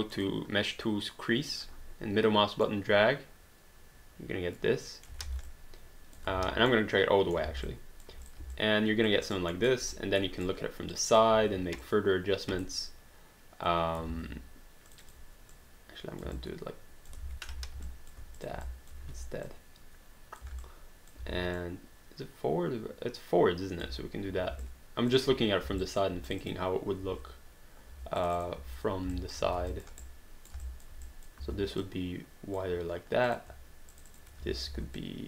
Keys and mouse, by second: 0.2 click, 1.5 click, 2.7 middle click, 5.2 alt+d, 5.4 alt+click, 6.7 middle click, 7.5 alt+d, 7.6 alt+click, 8.2 click, 8.5 alt+click, 9.3 alt+right click, 9.5 alt+middle click, 9.9 right click, 11.3 r, 11.8 click, 14.1 ctrl+z, 14.9 click, 16.4 alt+click, 17.2 ctrl+z, 17.9 alt+click, 18.4 shift+click, 18.6 alt+click, 19.4 r, 19.4 click, 20.6 alt+click, 21.2 w, 21.6 click, 24.6 alt+click, 25.8 alt+click, 26.3 click, 27.0 r, 28.2 click, 28.6 r, 29.2 alt+click, 29.4 q, 29.7 alt+click, 30.0 right click, 30.6 alt+click, 31.4 click, 33.3 click, 33.9 shift+click, 34.2-35.2 typing, 35.0 click.